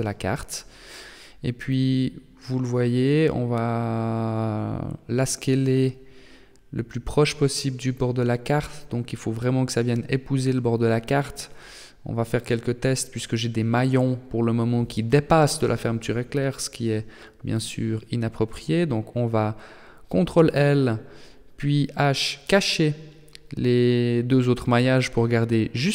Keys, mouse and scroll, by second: 1.5 s, 7.4 Tab, 7.9 middle click, 9.8 Tab, 11.1 middle click, 15.3 right click, 16.4 ctrl+l, 17.4 h, 18.6 right click, 19.7 ctrl+l, 20.1 h, 21.2-21.7 scroll up 1, 21.7 middle click.